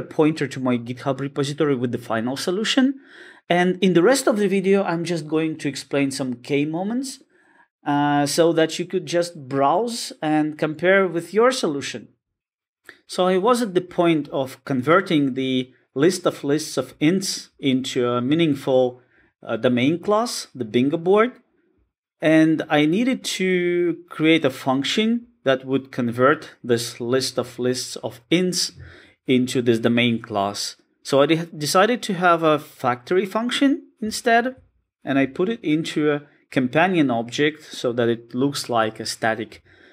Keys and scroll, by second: 34.5 super+b.